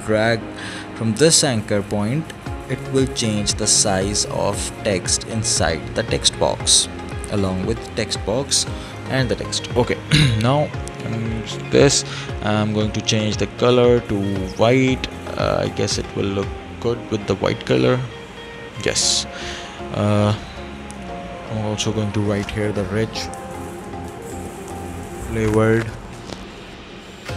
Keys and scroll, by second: 23.7-24.9 typing.